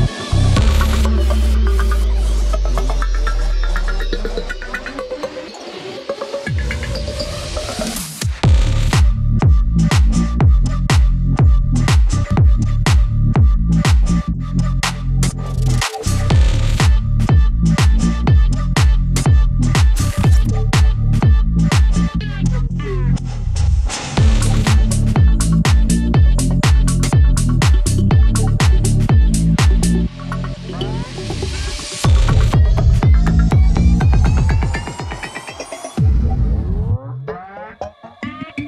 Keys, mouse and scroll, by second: 3.1 click, 3.7 ctrl+z, 4.3-9.7 drag, 9.7 click, 10.6-11.0 scroll up 1, 11.0-12.4 drag, 12.4 click, 13.8-14.3 scroll down 1, 14.3-17.1 drag, 17.1-17.5 scroll up 1, 17.5-26.4 drag, 26.6 scroll down 1, 27.1-27.4 scroll up 1, 27.4 scroll down 1, 27.8 scroll up 1, 28.3-35.7 drag, 35.8-38.4 drag, 38.4 ctrl+z.